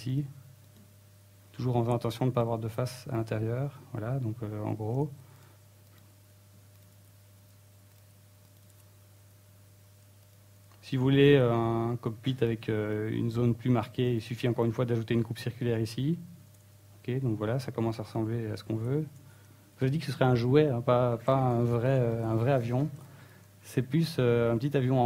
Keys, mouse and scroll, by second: 1.5 click, 1.9 right click, 2.4 x, 3.2 x, 4.2 middle click, 6.1 ctrl+Tab, 7.0 right click, 7.2 g, 7.8 click, 7.9 g, 8.9 click, 9.4 right click, 9.6 g, 11.3 click, 11.6 middle click, 12.6 middle click, 13.1 right click, 13.8 click, 14.9 ctrl+r, 16.8 click, 16.8 middle click, 17.2 Tab, 18.4 scroll down 1, 18.8 middle click, 19.8 Tab, 20.3 ctrl+r, 22.6 alt+right click, 23.0 alt+right click, 23.8 click.